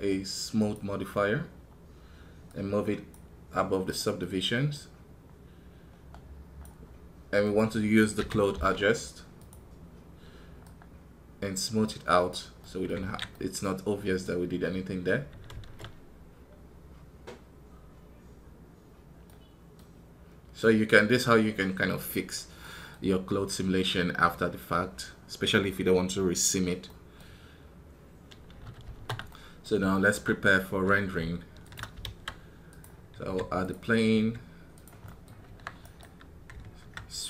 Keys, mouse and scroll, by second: 0.6-14.8 drag, 14.8-34.0 middle drag, 35.0 middle click, 35.1 scroll down 2, 35.6 right click.